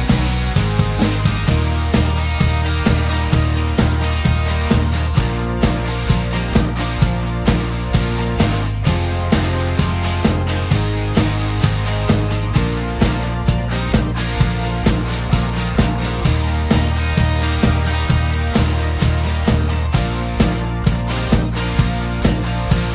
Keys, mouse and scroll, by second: 2.0 click, 2.1 4, 2.4 x, 6.9 click, 9.8 click, 10.7-11.1 scroll down 2, 11.3 scroll up 1, 11.4 scroll down 2, 12.0 scroll up 1, 12.4 scroll down 1, 12.7 click, 14.1 scroll up 2, 17.6 click, 17.8 middle click, 17.9-20.4 drag, 21.6-22.9 drag.